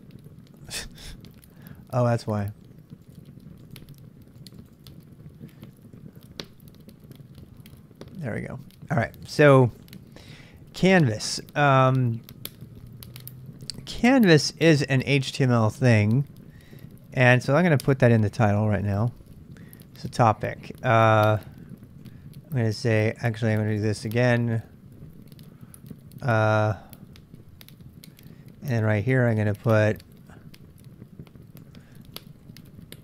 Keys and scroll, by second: 7.5 Return, 13.2 j, 14.0 j, 14.3 j, 17.9 super+Tab, 18.9 super+Tab, 19.7-20.5 typing, 22.0 typing, 23.2 ctrl+[, 23.4-24.7 typing, 26.2-29.7 typing, 31.3-33.0 typing.